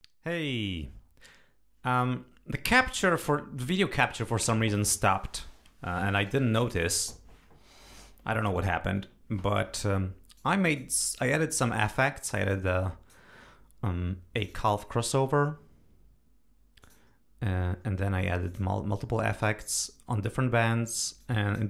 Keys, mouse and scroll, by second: 10.3 click, 12.6 click, 14.3 click, 16.8 click, 18.4 click, 21.2-21.6 drag.